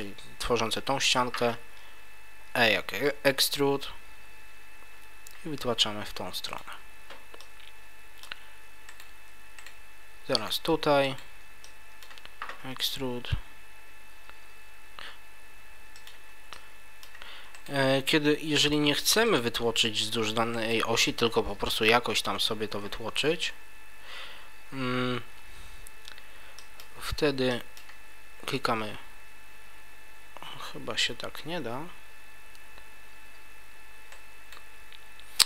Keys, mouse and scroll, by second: 0.4 middle click, 2.4 e, 6.6 click, 7.4 middle click, 8.8 right click, 9.6 shift+right click, 10.4 right click, 11.0 shift+right click, 11.6 middle click, 12.6 e, 16.0 click, 16.5 middle click, 17.5 right click, 19.3 shift+right click, 20.5 shift+right click, 23.2 e, 34.5 right click.